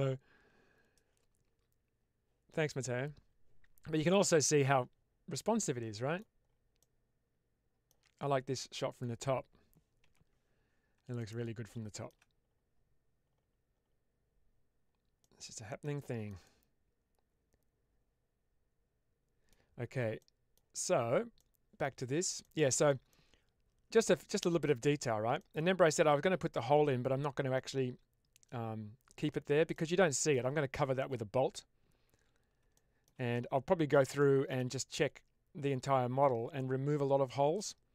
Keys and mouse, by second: 4.1-6.1 middle drag, 6.7-7.8 middle drag, 8.8 click, 10.0 h, 11.1-12.0 middle drag, 15.1-15.8 middle drag, 15.9 shift+middle drag, 16.3-19.4 middle drag, 20.1-20.5 middle drag, 21.3-21.7 middle drag, 22.3-22.8 middle drag, 23.0-24.6 middle drag, 25.3-25.8 middle drag, 29.6-30.2 middle drag, 32.8 shift+middle drag, 33.2-33.9 middle drag, 34.1 shift+middle drag, 34.6-36.2 middle drag, 37.1-37.5 shift+middle drag.